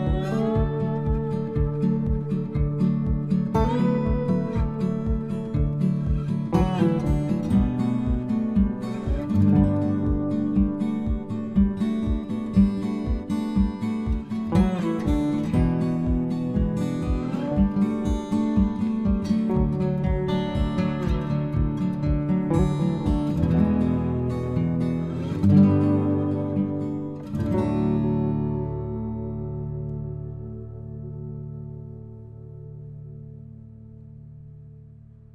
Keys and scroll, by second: 26.8 Return.